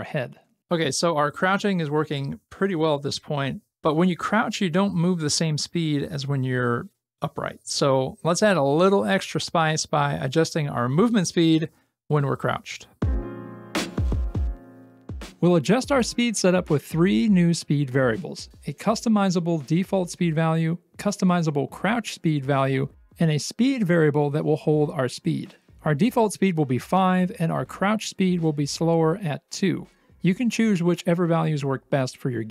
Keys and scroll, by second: 0.0-0.5 typing, 23.1 Return, 23.6 ctrl+v.